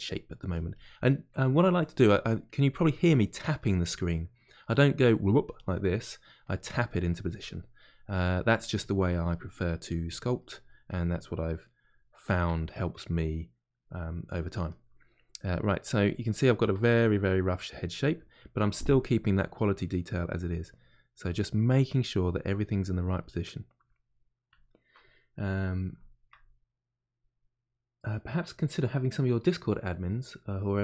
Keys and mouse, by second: 0.1 middle click, 0.5-2.0 drag, 2.0 middle click, 2.5 click, 3.1 middle click, 3.7 click, 4.1 middle click, 5.1 click, 5.9 middle click, 6.4-7.5 drag, 7.5 middle click, 8.1-9.4 drag, 9.4 middle click, 9.9 click, 10.3 middle click, 10.9 click, 11.6-15.8 middle drag, 15.8 click, 16.5-19.7 ctrl+middle drag, 19.7-21.3 drag, 21.3-22.4 middle drag, 22.4 click, 23.2-30.8 middle drag.